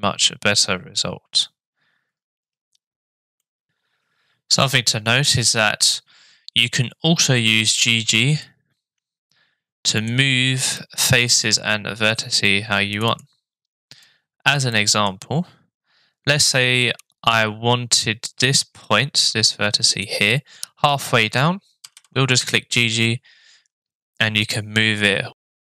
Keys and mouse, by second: 3.4 middle drag, 4.6 Tab, 8.5-10.1 shift+middle drag, 10.8 middle click, 13.1 click, 14.0 click, 14.7 middle click, 19.4 shift+middle click, 21.8 g.